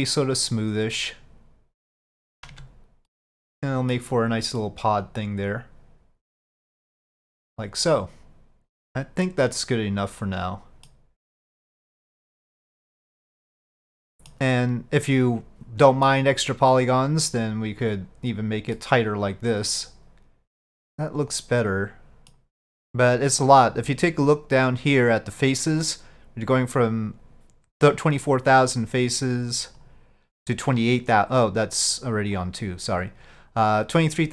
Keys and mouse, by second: 2.6 Tab, 3.2-4.0 middle drag, 4.6-11.0 middle drag, 12.0-12.7 middle drag, 14.1 middle click, 15.9 middle click, 17.5 click, 18.8-22.4 middle drag, 29.9-32.3 drag, 32.5-34.3 drag.